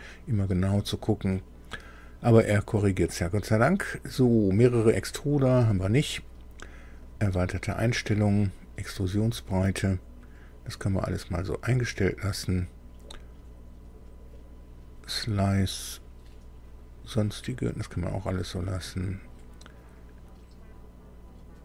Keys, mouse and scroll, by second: 4.6 click, 7.0 click, 18.3 click.